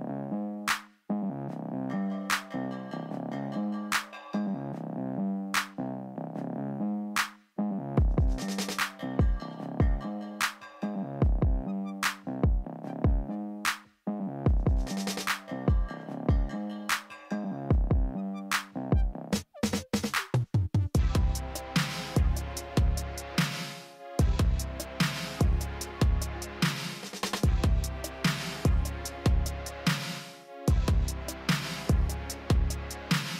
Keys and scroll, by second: 6.3 ctrl+z, 12.0 shift+s, 14.6 f, 17.2 shift+s, 19.5 shift+s, 23.5 shift+s, 33.1 s.